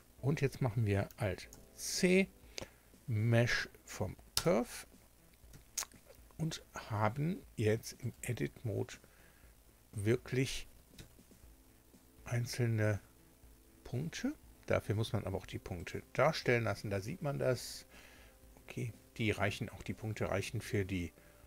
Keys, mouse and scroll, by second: 1.5 alt+c, 3.1 Down, 4.3 Return, 5.5 Tab, 8.0 right click, 9.0 Tab, 10.9 Tab, 12.0-12.4 scroll up 2, 12.7-13.1 scroll up 2, 13.9 scroll down 2, 15.8 click, 17.3 scroll down 2, 17.8-18.3 scroll up 2, 20.9-21.3 scroll down 2.